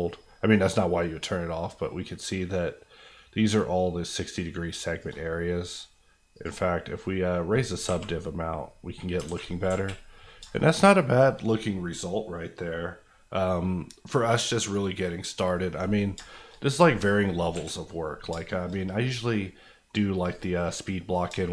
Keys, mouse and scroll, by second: 3.2-5.1 shift+drag, 7.1 scroll down 1, 7.7 scroll down 2, 7.8 alt+a, 8.0 alt+middle click, 9.1 scroll down 2, 9.2 alt+a, 9.6 KP_1, 10.5 shift+middle click, 10.8 middle click, 10.9 scroll, 11.0 scroll down 1, 11.2-13.2 middle drag, 15.1 scroll down 1, 15.3 middle click, 16.1 shift+middle click, 16.6 middle click, 16.6 scroll up 1, 17.5 KP_1, 18.3 shift+KP_1, 18.4 shift+middle click, 18.7 middle click, 18.9 scroll up 1, 19.3 middle click, 20.2 click, 20.7 middle click, 21.2 shift+middle click.